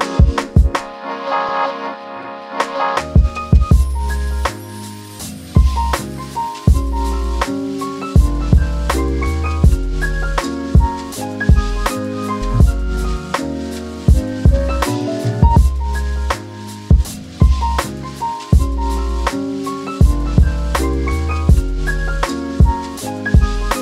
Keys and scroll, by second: 0.3 space, 1.5 space, 16.3 t, 22.4-23.3 typing.